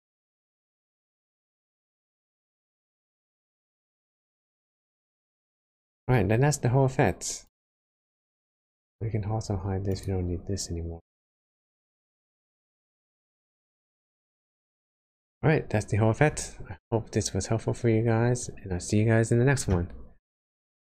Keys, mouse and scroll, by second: 3.0 click, 6.2 scroll down 1, 7.4 click, 7.4 scroll down 1, 8.3 middle click, 9.9 click, 11.6 scroll up 2, 12.2 scroll down 1, 12.6 scroll down 1, 12.8 shift+middle click, 14.0 middle click.